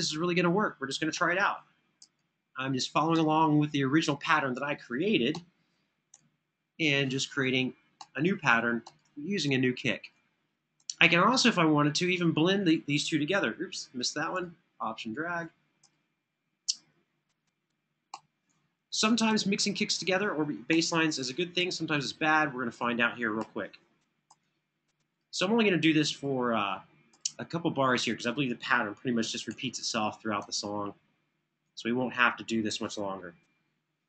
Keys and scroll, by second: 0.8 Right, 5.0 Right, 7.8 Right, 13.2 super+z, 17.8 Tab, 20.4 Tab, 23.1 Tab, 29.2 Tab, 32.7 Right.